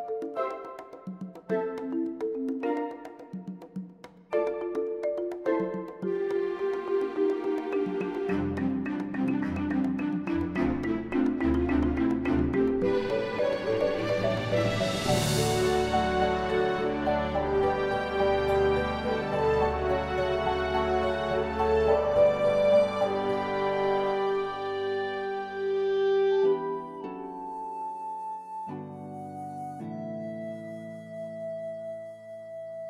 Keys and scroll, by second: 0.4 7, 1.8 g, 7.7 shift+z, 11.7 Tab, 13.2 Tab, 25.2 m, 28.5 m, 30.8 m.